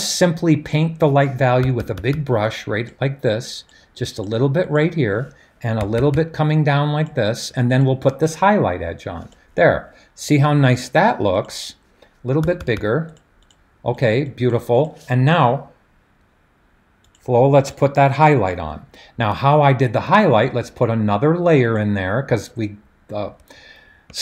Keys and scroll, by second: 1.6-2.2 typing, 5.5-7.0 typing, 12.4-12.8 typing.